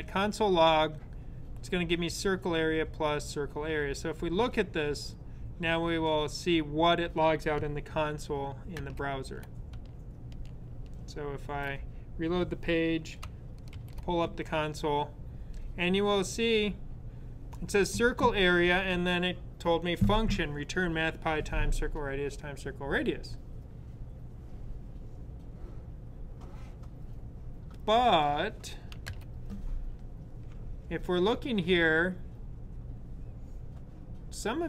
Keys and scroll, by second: 11.2 super+r, 13.5 alt+super+j.